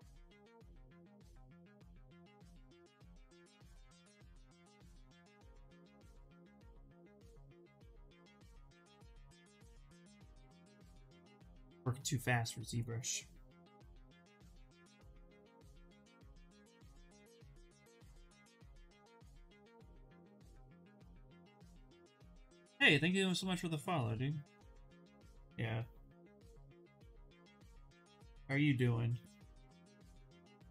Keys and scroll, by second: 6.5 ctrl+z, 6.8 ctrl+z, 15.2 s, 22.3 ctrl+z, 22.5 ctrl+z, 22.7 ctrl+z, 23.9 s.